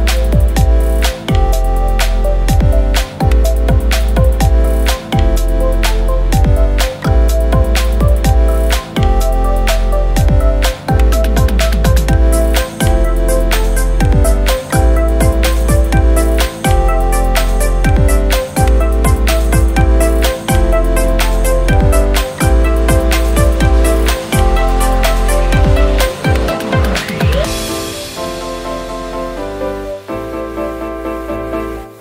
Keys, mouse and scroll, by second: 1.7 Caps_Lock, 1.8-3.1 typing.